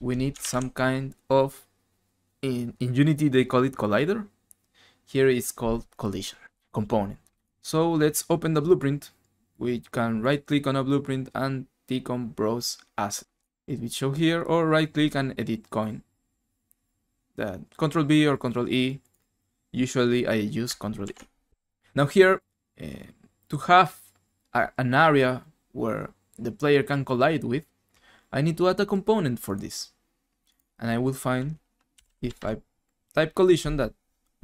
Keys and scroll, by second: 21.0 ctrl+e, 31.7-32.9 typing.